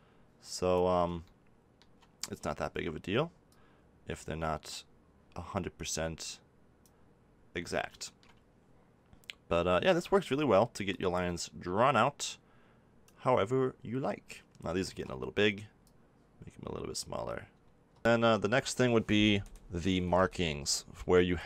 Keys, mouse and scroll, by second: 3.4-5.3 drag, 7.9-10.8 middle drag, 10.8-12.7 drag, 14.8 ctrl+z, 14.8 middle click, 15.8-17.6 drag, 18.0-21.3 middle drag, 21.3 click.